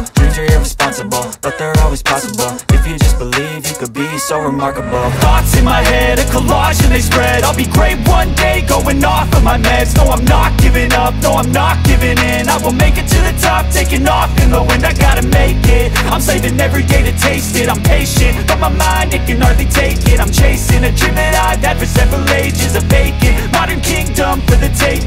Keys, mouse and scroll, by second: 0.0-4.1 drag, 7.4 scroll down 1, 11.0 right click, 13.6 click, 18.5 click.